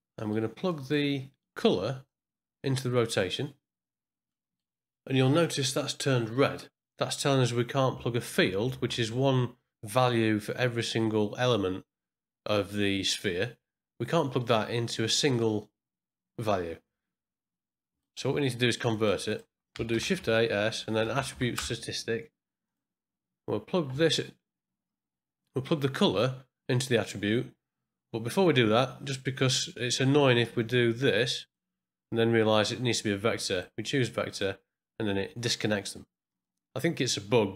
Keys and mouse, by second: 0.1 middle click, 0.6 click, 2.0-3.3 drag, 4.3-6.9 middle drag, 8.0 ctrl+middle click, 18.0 ctrl+right click, 18.9 click, 19.3 click, 19.9 shift+a, 21.2 Up, 23.9 middle click, 30.6-32.0 drag, 33.5-34.3 drag, 36.4 click.